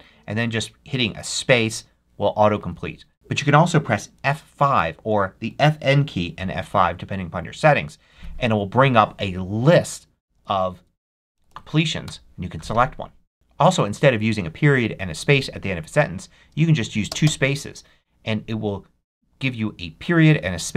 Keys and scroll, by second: 1.2 space, 2.3 BackSpace, 7.4 F5, 10.0 Down, 10.9 Up, 11.9 Return, 13.3 t, 17.0 space.